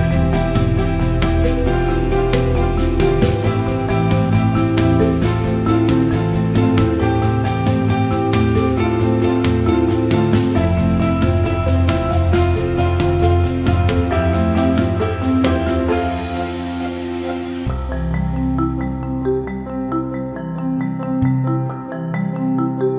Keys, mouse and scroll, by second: 0.6-1.7 drag, 2.2 alt+middle click, 3.2-4.8 drag, 5.0 click, 5.4 alt+middle click, 6.0 alt+middle click, 7.1 alt+middle click, 8.7 alt+middle click, 9.5 alt+middle click, 10.8 click, 11.7 click, 12.1 alt+middle click, 13.1 alt+shift+middle click, 14.3 alt+middle click, 14.7 alt+middle click, 17.2 alt+click, 17.9 click, 18.9 shift+click, 19.1 shift+click, 19.8 shift+click, 20.5 click, 21.2 shift+click, 22.3 shift+click, 22.6-22.9 right drag.